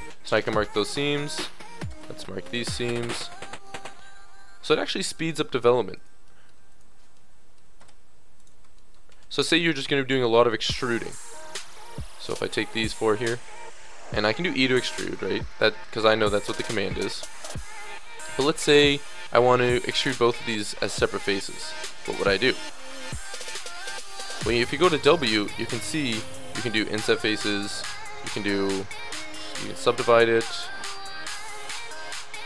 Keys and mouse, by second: 1.9 space, 2.9 a, 3.7 click, 3.9 middle click, 5.5 click, 5.9 right click, 6.4 middle click, 6.9 right click, 7.8 space, 9.1 Tab, 10.1 Tab, 14.1 e, 14.7 click, 16.5 e, 24.0 w, 31.5 click.